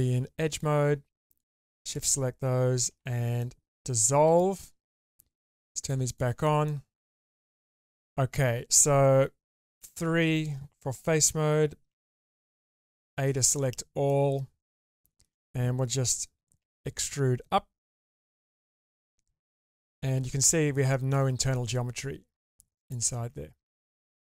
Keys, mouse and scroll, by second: 1.4 alt+shift+click, 2.9 ctrl+x, 3.4-4.4 middle drag, 5.5 click, 5.8 click, 6.1 click, 6.7 middle click, 9.7 3, 11.9 a, 14.0 middle click, 14.9 shift+middle click, 16.6 e, 19.8 alt+z, 20.4 middle click, 21.5-22.9 middle drag, 23.2 alt+z, 23.6 middle click.